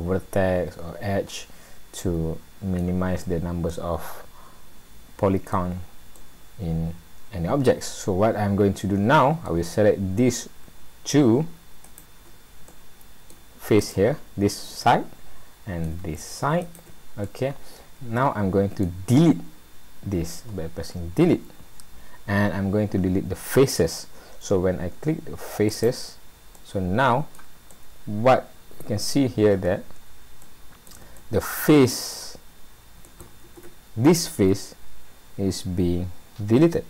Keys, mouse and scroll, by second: 0.0 middle click, 3.3 middle click, 6.1 middle click, 9.7-10.6 scroll up 1, 10.6-11.8 scroll up 1, 11.8 shift+click, 12.7 middle click, 13.8 click, 14.8 middle click, 16.6 shift+click, 17.3 middle click, 21.2 Delete, 26.6 middle click, 27.8 middle click, 29.3-29.8 scroll up 2, 30.0 scroll down 1, 30.4 middle click, 31.2 shift+middle click, 33.1 middle click, 33.6 ctrl+z.